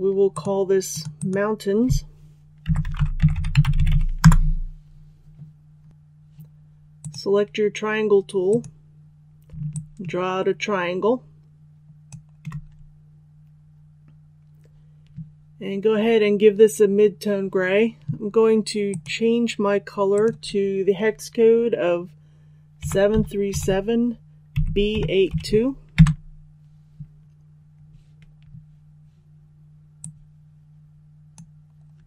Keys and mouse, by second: 2.6-3.8 typing, 4.1 Return, 5.9 click, 9.7-12.0 shift+drag, 18.8 click, 22.7 KP_7, 23.1 KP_3, 23.4 KP_7, 24.5 b, 24.9 KP_8, 25.2 KP_2, 29.9-32.0 drag.